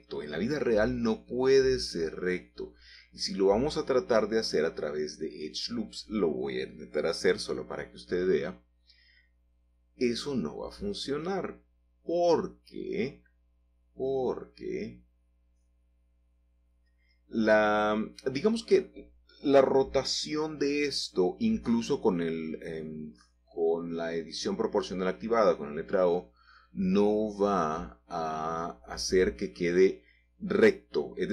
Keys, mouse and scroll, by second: 1.4-2.8 middle drag, 4.6 ctrl+r, 5.2-5.9 scroll up 1, 5.9-6.5 scroll down 1, 6.5 click, 7.6 click, 8.2-10.0 middle drag, 10.0 scroll up 1, 10.2 shift+middle click, 11.6-13.1 scroll down 1, 13.5 3, 15.6 1, 17.0-17.6 scroll up 2, 17.6-18.7 scroll down 2, 18.7-20.1 middle drag, 21.2 shift+middle click, 21.5 shift+middle click, 22.7-23.7 scroll up 2, 24.9 click, 25.7-26.9 scroll down 3, 27.1-28.9 shift+middle drag, 27.3 typing, 30.1 typing.